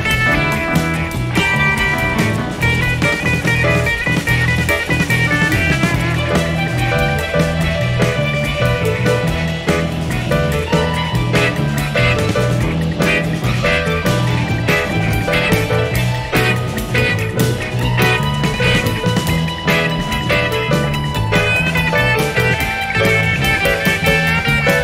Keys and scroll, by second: 2.2-2.7 typing, 5.8 +, 7.1 ctrl+d, 20.6-21.2 typing, 24.0 ctrl+d.